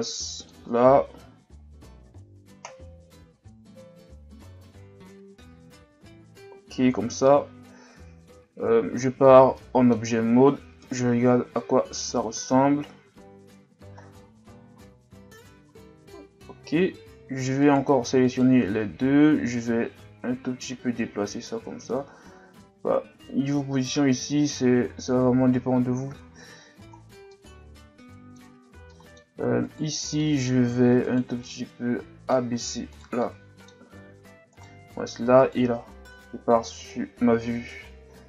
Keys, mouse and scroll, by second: 8.5 Tab, 8.9 a, 9.3-9.6 scroll down 1, 9.6-10.8 middle drag, 10.8 KP_1, 12.5-13.7 scroll down 1, 13.9-15.0 scroll up 8, 15.7-16.3 scroll up 1, 16.4 Tab, 16.9 Tab, 17.6 right click, 18.2 shift+right click, 18.7 Tab, 19.7 click, 25.6 Tab, 26.0 a, 26.3-26.9 scroll down 3, 26.9-27.3 scroll down 4, 27.3-28.6 middle drag, 28.6 scroll up 1, 28.9-29.6 middle drag, 29.6 right click, 29.9 Tab, 30.2 scroll up 1, 30.2 middle click, 31.0 right click, 31.5-32.9 middle drag, 32.9 shift+right click, 33.2-34.5 middle drag, 34.5 right click, 35.4 shift+right click, 36.2 KP_1, 36.9-37.6 scroll up 5, 37.9 shift+scroll down 2, 38.1-38.2 scroll up 2.